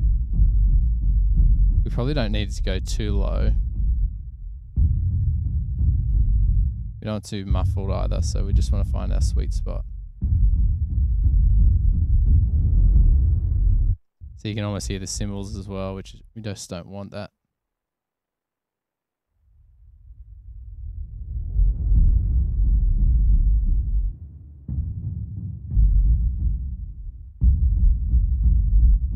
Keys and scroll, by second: 14.0 space, 14.3 space, 18.7 super+=.